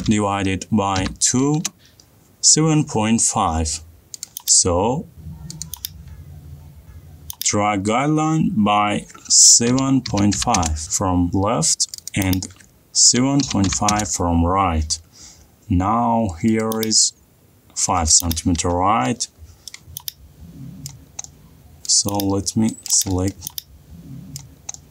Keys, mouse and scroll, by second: 0.2 /, 1.3-1.7 typing, 4.5 click, 5.2 ctrl+z, 6.9 t, 7.4 click, 9.9-10.8 typing, 12.3 click, 13.3-14.1 typing, 15.8 middle click, 15.9 middle click, 16.7 scroll, 16.9 click, 18.3 click, 18.6-19.9 scroll, 19.9-21.3 middle click, 19.9 scroll, 21.7 middle click, 23.1 click, 24.6 click.